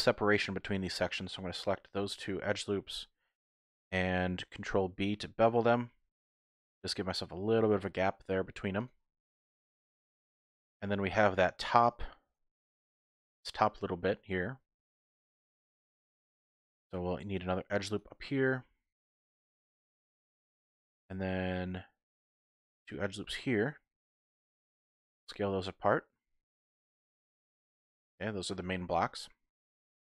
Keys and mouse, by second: 0.0-0.5 typing, 2.1 shift+click, 4.9 ctrl+b, 8.8 click, 10.5-11.6 shift+drag, 16.6 ctrl+r, 20.1 click, 21.1 ctrl+r, 22.5 click, 24.5 s, 24.7 x, 27.8 click.